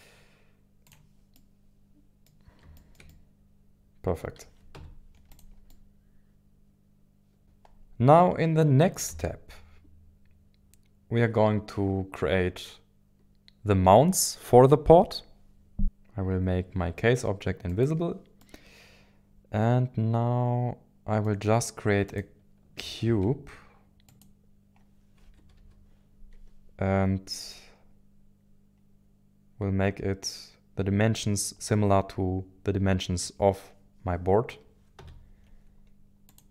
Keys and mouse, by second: 0.8 click, 1.3-2.6 middle drag, 2.7-4.2 shift+middle drag, 4.7 z, 5.7-7.4 middle drag, 7.4 KP_1, 7.4 KP_7, 9.1 ctrl+s, 17.7 click, 18.4-21.3 middle drag, 22.1 click, 23.0 shift+a, 25.2 KP_1, 25.6 KP_7, 35.0 z.